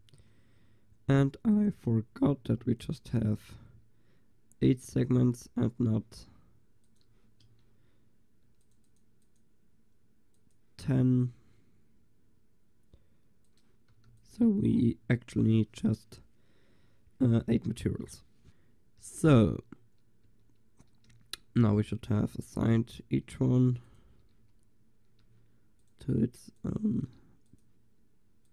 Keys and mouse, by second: 1.6-2.3 drag, 2.6 a, 7.5 Tab, 14.1 ctrl+s, 20.3 Tab, 21.1 a, 22.0-28.5 drag, 24.5 a, 25.3 a, 27.1 a.